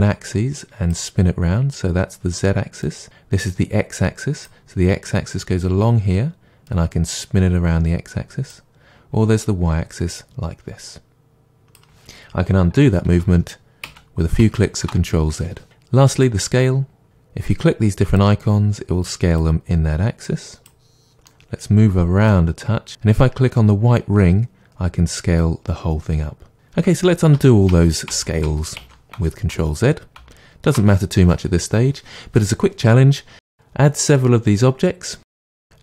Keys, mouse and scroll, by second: 12.9 ctrl+z, 20.2-21.2 drag, 21.2-22.9 middle drag, 22.9-26.5 drag, 26.5-33.7 middle drag, 26.9 ctrl+z, 33.7-35.8 drag.